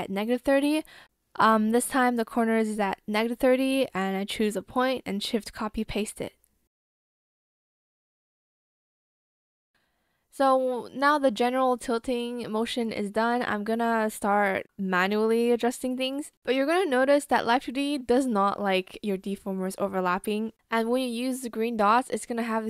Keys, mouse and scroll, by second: 3.3 ctrl+shift+c, 3.7 ctrl+shift+v, 5.2 ctrl+z, 6.8 ctrl+shift+c, 6.9 ctrl+shift+v, 8.1 ctrl+z, 11.0 ctrl+shift+c, 11.6 ctrl+shift+v, 12.6 ctrl+shift+v, 16.6 ctrl+z, 17.2 ctrl+shift+z, 18.3 ctrl+z, 22.1 ctrl+z.